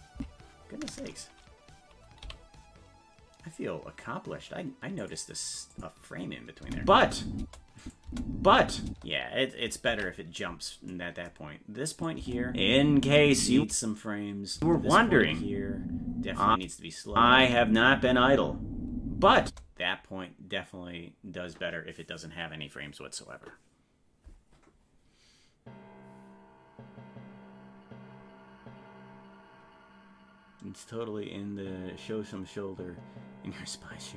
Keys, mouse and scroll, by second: 0.2 Left, 2.2 g, 5.7 click, 6.6 space, 7.8 click, 8.1 space, 10.3 ctrl+s, 12.0 click, 12.2 space, 14.0 space.